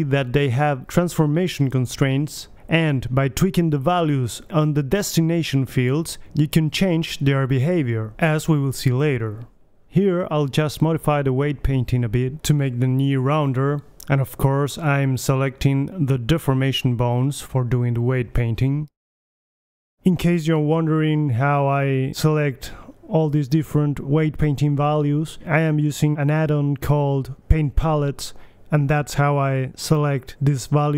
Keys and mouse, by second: 6.2-7.2 drag, 7.2-9.6 middle drag, 9.6-10.7 right drag, 11.2 middle drag, 11.4 right click, 11.8 middle drag, 12.1-13.4 right drag, 13.0-13.7 middle drag, 14.4 middle click, 14.6 right click, 15.0 click, 15.2-15.5 right drag, 15.6-16.5 right drag, 17.5-21.2 drag, 22.6 click, 23.2-24.6 middle drag, 24.6-25.8 drag, 25.9-28.8 drag, 28.8-30.7 middle drag.